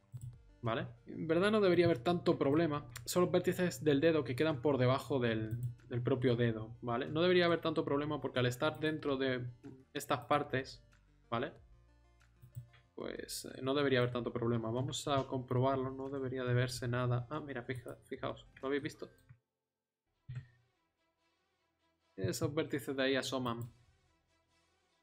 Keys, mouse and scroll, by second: 0.6 middle drag, 1.0-2.4 middle drag, 5.5-6.6 middle drag, 7.1-8.5 middle drag, 14.0 middle click, 14.8 r, 18.2 middle click, 20.1 r, 21.8 scroll up 1.